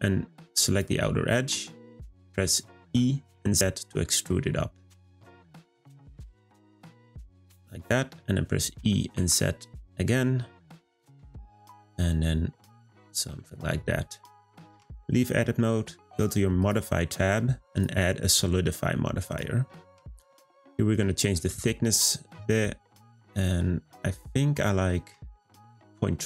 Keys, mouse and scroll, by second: 2.2 middle click, 2.8 e, 13.4 middle click, 14.3-14.7 scroll up 1, 14.7 Tab, 16.6 click, 17.7-19.8 drag, 19.8-21.0 middle drag, 21.0-24.1 drag.